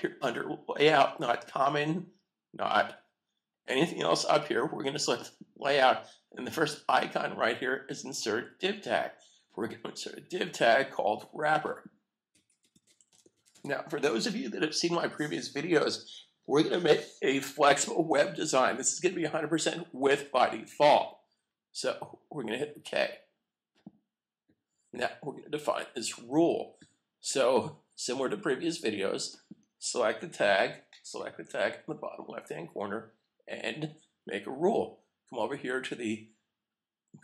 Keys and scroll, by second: 12.6-13.3 typing, 14.8 typing.